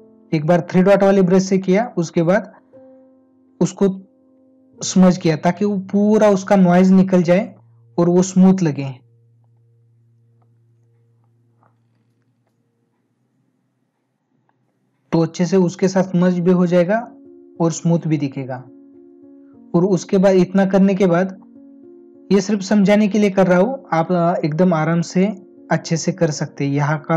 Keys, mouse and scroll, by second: 0.8 space, 8.7 space, 15.6 ctrl+alt+z, 20.7 ctrl+-, 23.1 space.